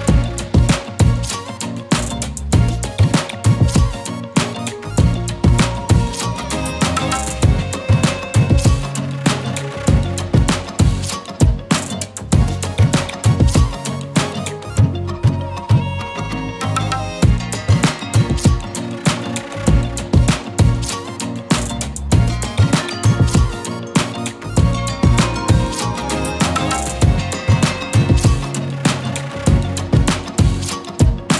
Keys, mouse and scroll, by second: 0.7-1.9 shift+drag, 5.4 scroll down 1, 7.0 click, 12.1 z, 12.4 click, 12.7 z, 13.7 click, 15.3 shift+click, 16.6 right click, 17.3 click, 18.7-20.9 click, 21.9 z, 22.2 click, 22.3-22.8 z, 22.5 z, 23.5 click, 25.5-26.1 drag, 26.8 z, 26.9 click, 27.3-27.9 z, 28.3 click.